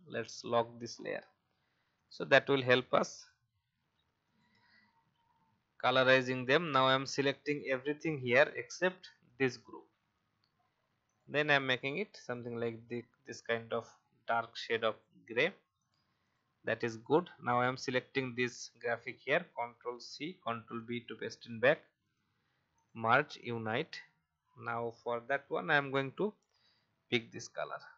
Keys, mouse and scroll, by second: 0.5-1.9 scroll down 1, 1.9-4.9 drag, 5.2 alt+scroll up 1, 6.3-7.2 alt+scroll down 1, 7.2 click, 9.2 shift+click, 11.0 click, 17.0 alt+scroll up 1, 17.8 click, 19.9 ctrl+c, 20.4 b, 22.0 click, 25.6 i, 26.6 click, 27.6 v.